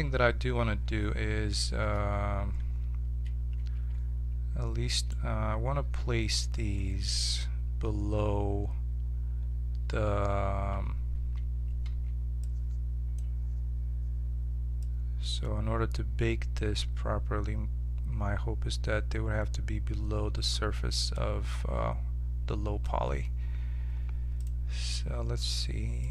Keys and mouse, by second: 1.9 z, 3.6 shift+2, 4.9-6.6 right drag, 10.7 1, 11.9 b, 14.8-21.1 drag, 21.5-22.6 middle drag, 24.4-26.1 drag.